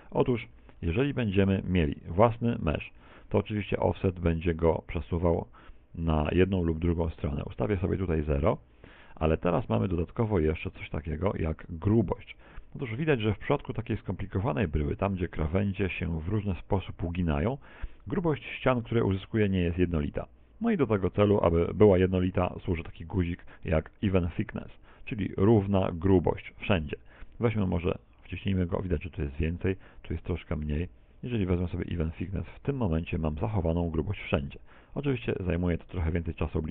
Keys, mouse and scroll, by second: 2.8 a, 8.3 Tab, 8.8 middle click, 9.5 middle click, 9.7 middle click, 10.1 middle click, 10.3 middle click, 10.7 middle click, 10.8-11.6 shift+scroll up 4, 11.6 shift+middle click, 12.1 Tab, 12.4 middle click, 17.6 click, 19.9 click, 24.6 middle click, 26.9-27.2 scroll down 2, 29.5 middle click, 31.5 middle click.